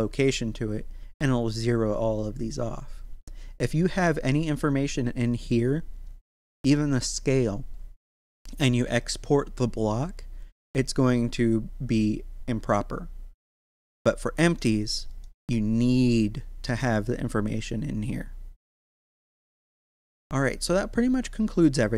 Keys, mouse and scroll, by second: 8.5 right click, 13.5-14.4 scroll up 1, 14.4 right click, 20.2-21.0 scroll down 1, 21.0 click.